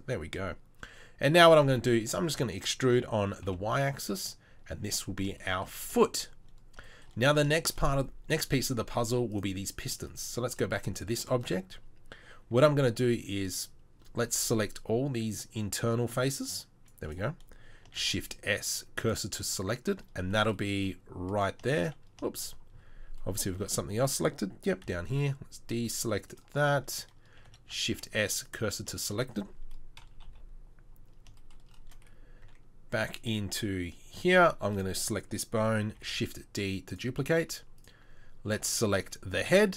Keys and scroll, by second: 1.3 e, 3.5 e, 9.9 Tab, 10.3 Tab, 12.6 c, 18.0 shift+s, 24.8 c, 27.4 shift+c, 27.8 shift+s, 30.3 KP_3, 32.5 Tab, 34.3 Tab, 36.0 shift+d.